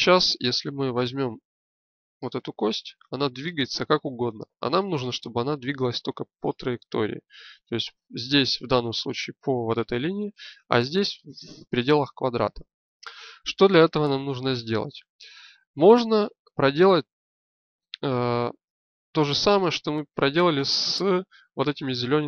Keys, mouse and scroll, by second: 2.0 g, 5.0 click, 16.4 n.